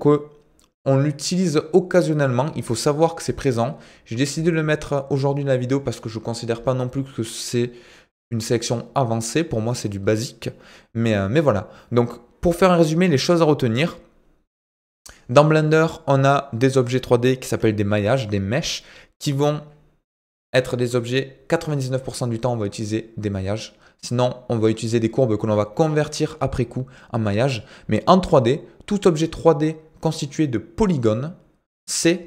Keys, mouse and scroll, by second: 1.4 click, 14.7-15.2 drag.